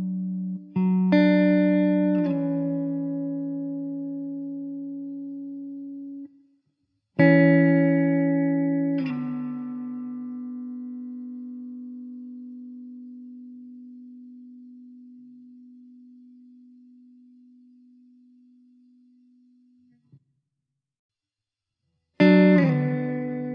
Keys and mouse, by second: 0.0 KP_5, 1.2 KP_4, 1.3 Return, 5.8-6.7 typing, 18.1 middle click.